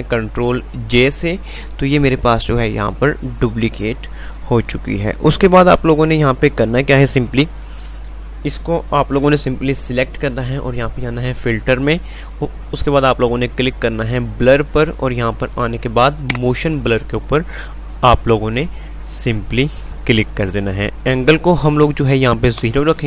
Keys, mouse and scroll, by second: 1.2 ctrl+j, 11.5 click, 16.3 click.